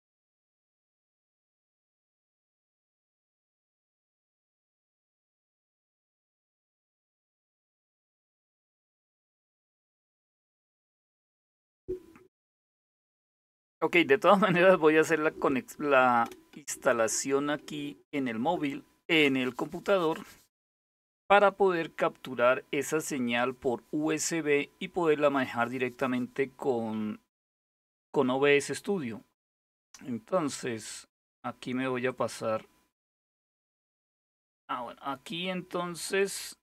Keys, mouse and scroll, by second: 4.5 ctrl++, 4.9 ctrl++, 31.7 click, 35.8 click.